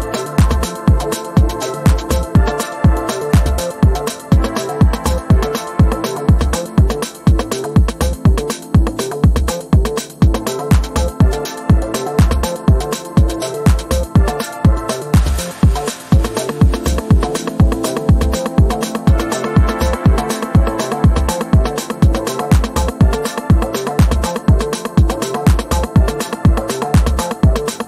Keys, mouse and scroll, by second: 2.2 ctrl+z, 3.5 click, 5.9 click, 8.7 click, 11.1 click, 13.4 click, 15.4 click, 19.3 Delete, 20.0 ctrl+scroll down 1, 21.0-21.4 ctrl+scroll down 1, 21.4 z, 23.0 click, 23.1-24.0 z, 24.7-26.5 drag.